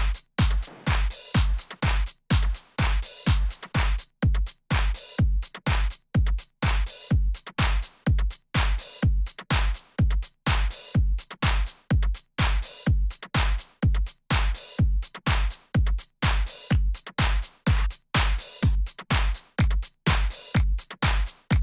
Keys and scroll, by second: 6.6 d, 13.0 super+Up, 17.5 Down, 20.2 Up.